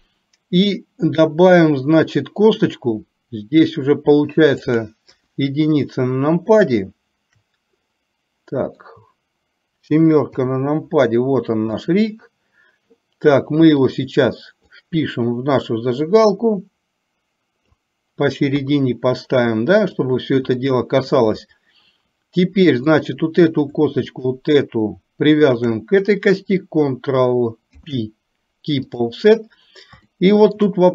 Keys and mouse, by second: 4.8 click, 5.2 KP_1, 6.6-9.0 shift+middle drag, 10.3 KP_7, 12.0 click, 14.0 click, 14.8-17.8 drag, 18.6 KP_3, 20.7 shift+middle click, 23.0 click, 24.2 shift+click, 25.6 shift+click, 27.8 ctrl+p, 30.1 shift+middle click.